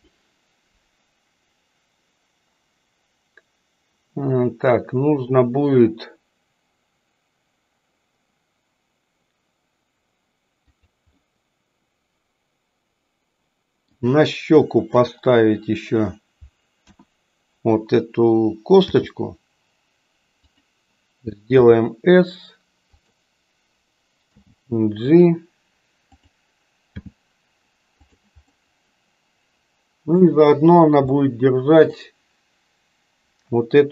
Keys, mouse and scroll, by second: 11.2-13.9 middle drag, 16.8 KP_1, 18.8 g, 21.4 s, 24.2 g, 27.1 g, 28.4-30.2 middle drag, 31.2 middle click.